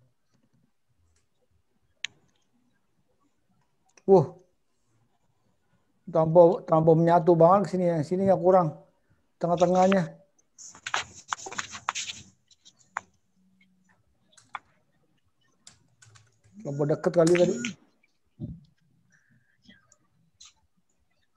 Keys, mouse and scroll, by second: 17.3 BackSpace, 17.3 0, 19.0 scroll down 2, 19.6 scroll down 1.